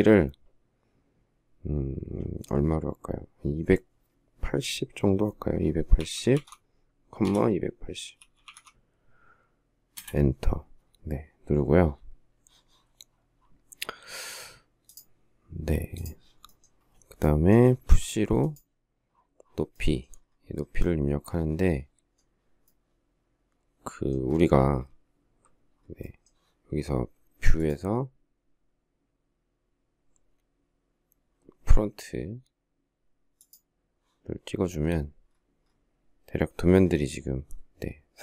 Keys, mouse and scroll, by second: 5.6-8.8 typing, 9.8 Return, 17.6 p.